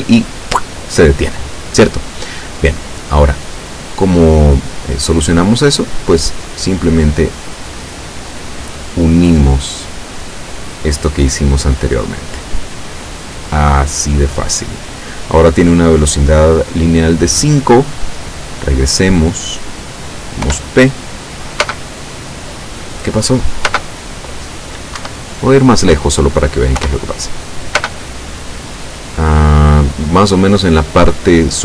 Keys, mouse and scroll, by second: 4.0 click, 7.7 right click, 10.6-11.6 drag, 12.6-13.7 drag, 19.1 click, 20.5 p, 21.7 space, 23.8 space, 25.0 Escape, 25.6-25.9 scroll down 1, 26.8 p, 27.9 space.